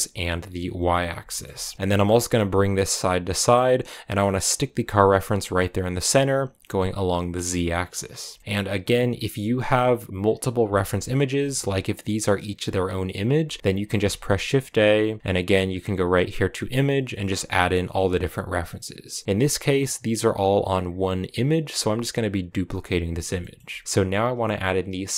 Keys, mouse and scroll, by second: 0.5 KP_1, 1.1 shift+middle click, 1.4-1.7 scroll down 1, 1.7 g, 5.3-5.9 scroll down 2, 8.0 scroll down 2, 8.2-10.4 shift+middle drag, 10.4 scroll down 1, 10.6-23.6 shift+middle drag, 23.6-25.1 scroll up 1.